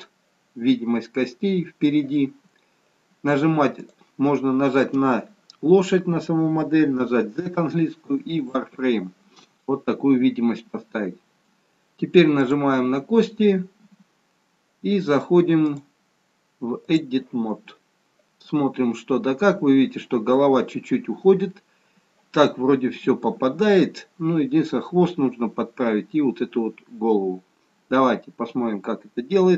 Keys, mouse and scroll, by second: 4.2 click, 7.1 z, 10.0-10.8 scroll up 1, 10.8-12.5 scroll down 1, 12.5 click, 15.6 click, 18.7-20.7 scroll down 1, 21.0-21.8 scroll down 1, 28.3-28.7 scroll up 1, 28.7-29.5 scroll down 1.